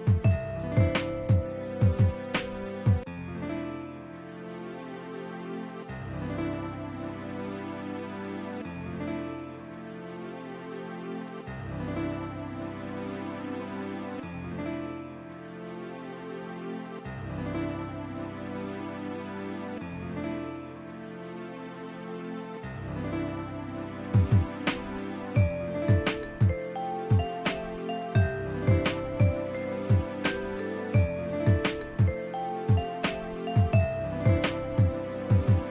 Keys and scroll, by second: 15.9 ], 16.1 [.